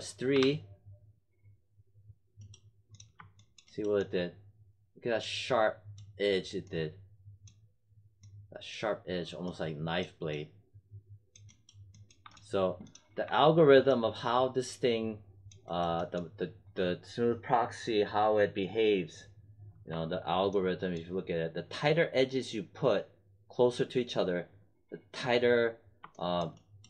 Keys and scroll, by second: 0.3 3, 13.1 1.